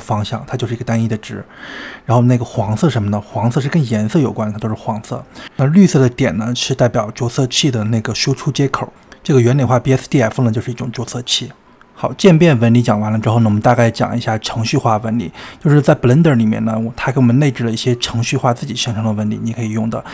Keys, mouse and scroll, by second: 7.0 click, 8.3 drag, 10.8 space, 13.4 scroll down 3, 14.0-16.5 middle drag, 16.5 space, 18.8 click.